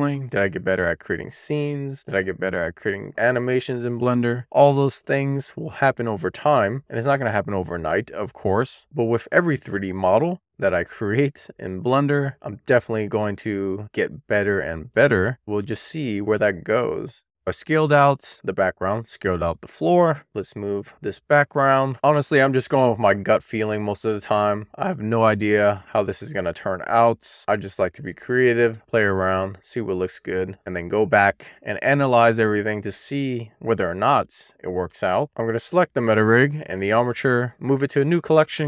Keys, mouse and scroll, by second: 1.1-1.9 scroll down 1, 1.9 click, 3.5-4.3 scroll down 1, 4.3 click, 5.9-6.7 scroll down 1, 6.7 click, 8.0-8.5 scroll down 1, 8.8 click, 10.4-11.2 scroll down 1, 11.2 click, 12.5-13.4 scroll down 1, 13.4 click, 14.9-15.8 scroll down 1, 15.8 click, 17.3 click, 17.6 e, 17.9 scroll down 1, 18.0 shift+middle click, 18.2 click, 18.9 click, 19.0 Tab, 19.2 click, 20.3 shift+middle click, 20.5 click, 22.9 shift+middle click, 23.1-23.5 shift+scroll up 1, 23.7 middle click, 23.8 scroll up 1, 24.5-25.0 scroll up 1, 25.0-25.4 scroll down 1, 25.4 middle click, 25.9 shift+middle click, 26.9-28.3 scroll down 1, 28.3-32.7 middle drag, 33.0 shift+middle click, 35.4 super+click, 37.5 m.